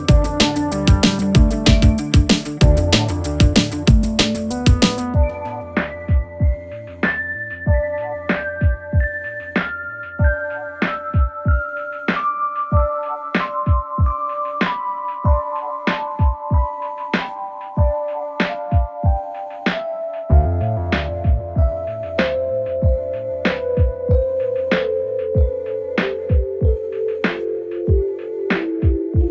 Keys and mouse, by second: 0.0 shift+middle click, 1.0 ctrl+middle click, 1.7-2.8 shift+middle drag, 3.5 middle click, 5.0 shift+click, 6.0 Tab, 6.3 click, 7.8 ctrl+a, 9.5 click, 11.1 shift+d, 16.3 drag, 16.7-17.2 shift+drag, 18.9 s, 23.5 ctrl+a, 24.2 Tab, 24.7 2, 24.9 click, 25.8 ctrl+b, 27.7 2, 28.0 alt+click.